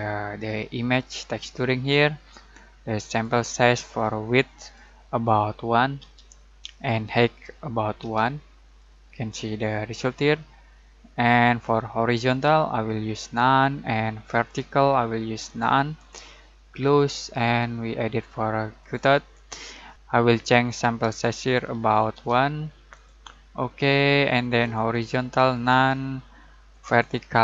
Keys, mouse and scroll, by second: 0.7 click, 3.1-4.9 drag, 6.0 1, 7.0-7.6 click, 8.0 1, 8.6 click, 12.2 click, 22.1 1, 22.9 click.